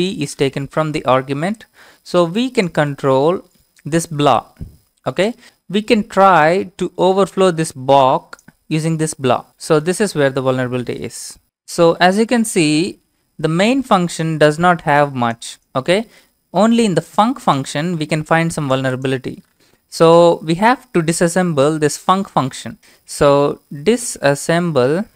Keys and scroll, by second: 23.5-25.1 typing.